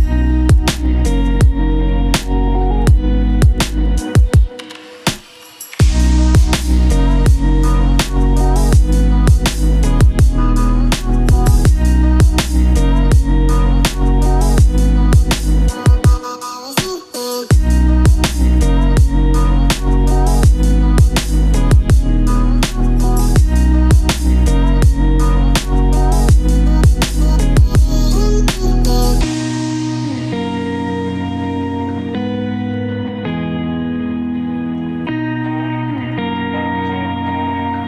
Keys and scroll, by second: 21.0 ctrl+shift+q, 23.3 ctrl+a, 24.2 ctrl+q.